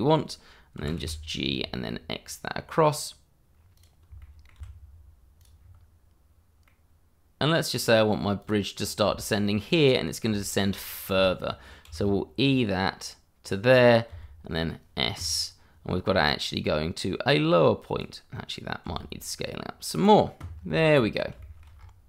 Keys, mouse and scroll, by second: 0.8 g, 1.0 y, 1.4 x, 3.7 click, 4.2 shift+middle click, 4.6 x, 5.4 click, 5.6-6.6 scroll down 1, 6.6 middle click, 8.4 click, 8.8 scroll up 1, 9.1 shift+middle click, 10.4 shift+middle click, 10.8-11.2 scroll up 1, 11.2 shift+middle click, 11.8 e, 13.4 click, 14.1 s, 17.3 click, 18.8 s, 19.9 click, 20.3-20.7 scroll down 1, 21.1 scroll up 1, 21.4 shift+middle click, 21.7-22.0 scroll up 1.